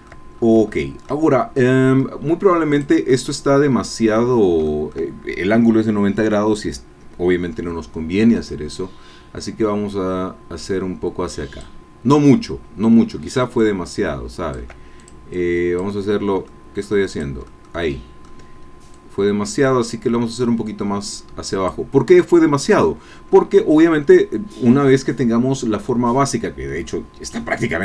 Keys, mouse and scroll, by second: 0.3 shift+scroll up 2, 0.7 shift+click, 1.3 shift+scroll down 2, 1.5 click, 2.7 click, 3.1-4.3 drag, 4.3 middle click, 4.4 scroll down 1, 4.7 shift+click, 5.1-6.5 shift+middle drag, 8.4-11.8 drag, 13.6-14.7 shift+drag, 15.0 shift+click, 15.3 shift+click, 16.4 middle click, 16.7 click, 17.5 middle click, 18.9-21.9 drag, 22.0 scroll down 1, 22.2-23.5 middle drag, 24.1-27.8 drag.